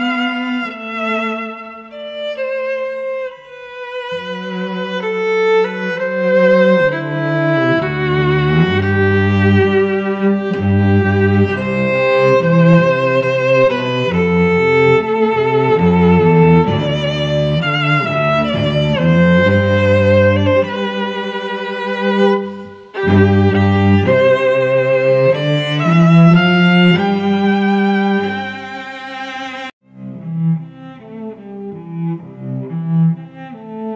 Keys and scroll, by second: 5.8 space, 6.7 ctrl+v, 7.5 ctrl+t, 9.6 Return, 10.3 ctrl+alt+g, 18.6 Return, 19.7 space, 23.8 a, 25.1 shift+Right, 27.9 shift+Down, 30.2 shift+Up, 33.2 Right.